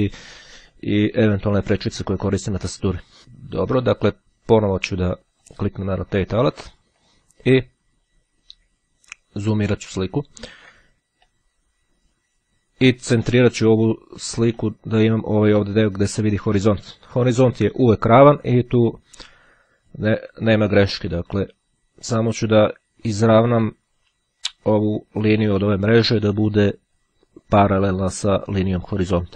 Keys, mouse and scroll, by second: 5.4 click, 7.2 click, 9.0-9.6 ctrl+scroll up 2, 11.4-15.2 drag, 20.8-24.0 drag, 26.9-29.3 drag.